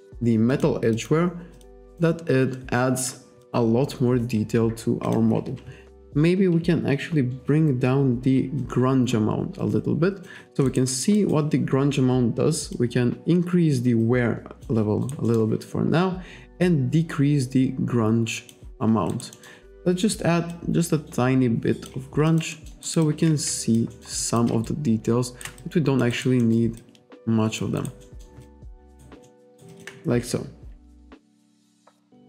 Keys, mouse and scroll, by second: 0.6 click, 1.0 click, 1.6 click, 1.9 click, 3.0 click, 3.5 click, 5.1 click, 8.6 click, 10.7 alt+right click, 12.8 click, 15.1 alt+right click, 15.3 alt+middle click, 16.6 click, 19.2 alt+right click, 20.6 click, 22.3 alt+click, 22.9 alt+right click, 23.1 alt+click, 24.3 alt+click, 24.7 shift+right click, 25.7 alt+click, 26.2 alt+right click, 26.5 alt+middle click, 26.8 alt+click, 27.8 alt+right click, 28.1 alt+middle click, 28.5 alt+click, 28.9 alt+right click, 29.3 alt+middle click, 29.5 alt+right click, 29.8 alt+click, 31.0 click.